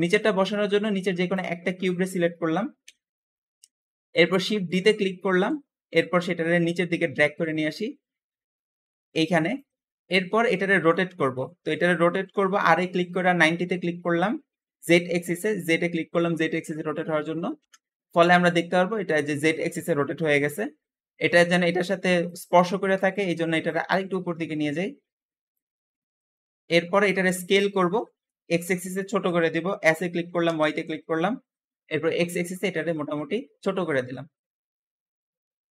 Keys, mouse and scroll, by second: 0.5-1.2 scroll up 1, 1.2 click, 1.5-2.7 shift+middle drag, 2.7 KP_Decimal, 3.6 middle click, 4.2-4.5 scroll up 2, 4.5 middle click, 5.1 shift+d, 6.7 click, 9.7-10.1 scroll down 2, 10.1-11.0 middle drag, 11.0 scroll up 1, 11.2-12.0 middle drag, 12.0 r, 18.5-20.5 middle drag, 20.5-21.6 scroll up 3, 21.6-23.5 scroll up 1, 23.5 click, 25.7-26.0 scroll down 3, 26.0-29.0 middle drag, 29.7 s.